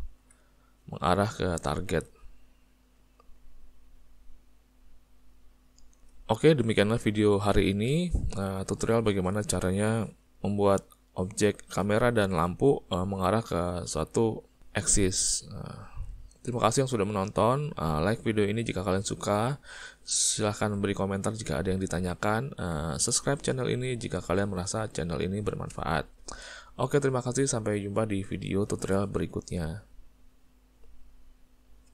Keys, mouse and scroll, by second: 0.2 g, 6.7 middle click, 7.9 ctrl+middle click, 8.7 shift+middle click, 9.1 ctrl+middle click, 9.8 middle click, 10.8 ctrl+middle click, 14.7 middle click, 15.4 middle click, 18.5 ctrl+middle click, 19.7 click, 20.6 g, 26.1 ctrl+middle click, 27.5 ctrl+middle click.